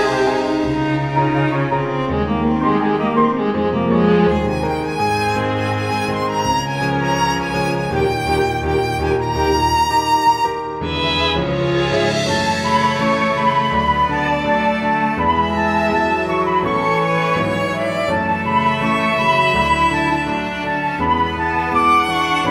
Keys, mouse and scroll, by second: 1.1-1.5 scroll down 1, 1.7 click, 1.9-4.3 scroll down 16, 4.3 click, 8.6-9.7 scroll up 4, 9.8 shift+middle click, 10.3-11.0 scroll up 1, 13.5 click, 17.2-17.7 scroll up 2, 17.9-18.4 scroll down 3, 18.6 click, 19.4-21.0 scroll up 9, 21.9 click.